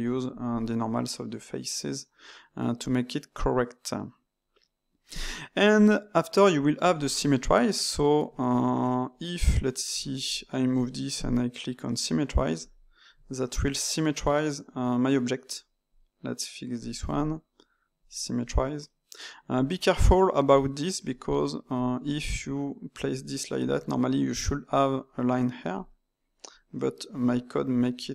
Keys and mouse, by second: 1.6-4.7 middle drag, 8.9 middle click, 9.4 Tab, 9.9 Tab, 10.2 click, 12.5-13.3 drag, 13.3-15.9 middle drag, 15.9 click, 17.9 click, 18.8 middle click, 19.4 click, 25.7-26.8 drag, 26.8-28.1 middle drag.